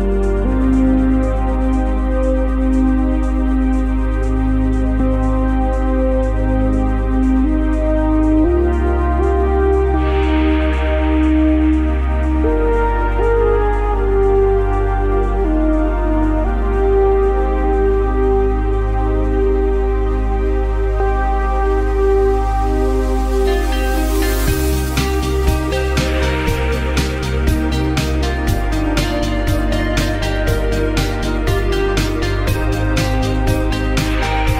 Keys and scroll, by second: 18.4 v.